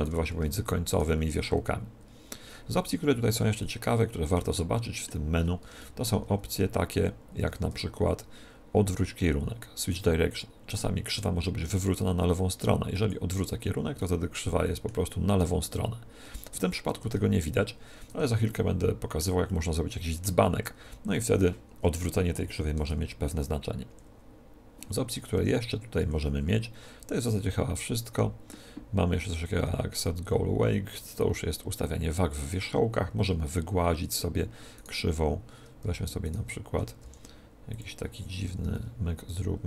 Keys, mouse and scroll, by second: 2.9 a, 3.5-8.2 middle drag, 7.3 a, 7.6 w, 13.9-15.6 middle drag, 16.9 Tab, 18.0 Tab, 18.4-21.2 middle drag, 22.7 Tab, 23.8 w, 25.3 Tab, 26.0 w, 34.7-37.9 right drag, 35.7 a, 36.9 r, 37.7-39.6 drag, 38.4 a, 38.6 a, 39.2 w.